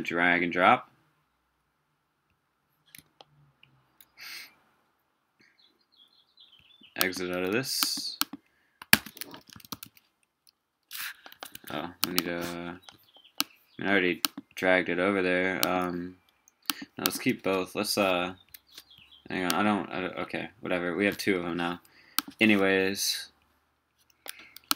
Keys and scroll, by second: 8.9 super+space.